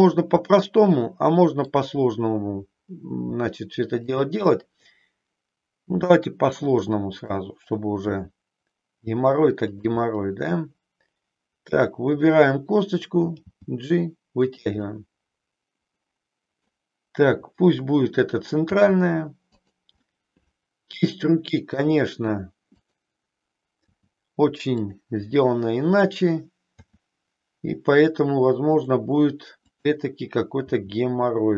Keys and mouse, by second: 3.3 g, 4.5-7.4 middle drag, 8.1 e, 9.7 click, 10.1-12.1 middle drag, 13.4 g, 14.6 click, 14.9-16.6 middle drag, 18.6 g, 19.6 click, 20.0-21.9 middle drag, 23.9 g, 24.9 click, 28.7 click, 30.6 e.